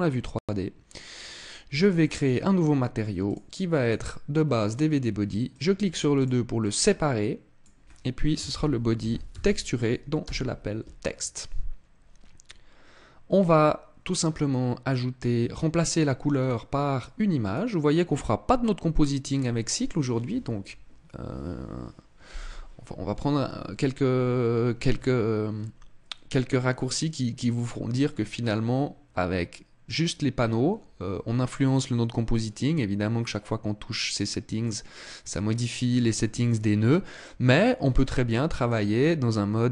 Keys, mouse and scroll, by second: 1.9 click, 2.9 click, 5.2 click, 5.8 click, 16.0 click, 37.2 click.